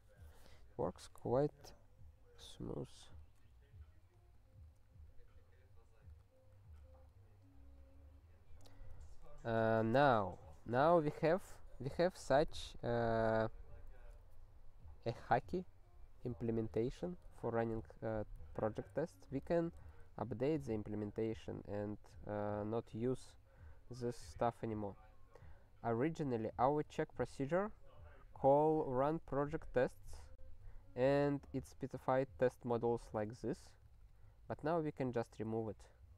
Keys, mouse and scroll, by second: 4.0 click, 6.2 ctrl+p, 6.5 Return, 6.8 ctrl+s, 16.9 click, 17.1 click.